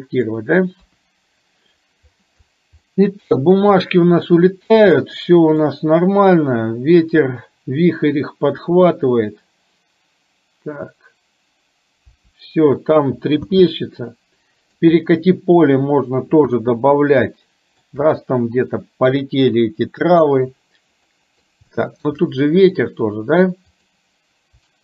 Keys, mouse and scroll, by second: 1.0 KP_1, 2.9 scroll up 1, 3.0 middle click, 4.4 middle click, 5.0 shift+middle click, 13.6 space, 14.1 middle click, 17.4 shift+middle click, 21.2-21.9 scroll up 2, 21.4 middle click, 21.9 shift+middle click, 22.4 middle click.